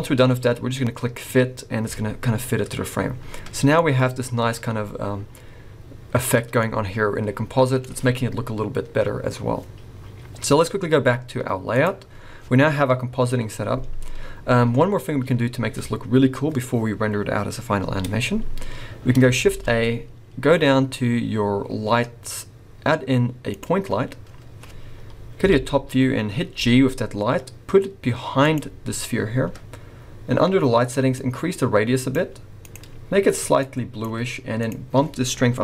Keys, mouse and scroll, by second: 11.8 click, 15.2-18.1 scroll up 1, 18.1 scroll up 1, 18.7 scroll down 2, 19.4 shift+a, 25.4 KP_7, 26.3 scroll down 3, 26.6 g, 31.1 click, 32.6 click, 34.6 click.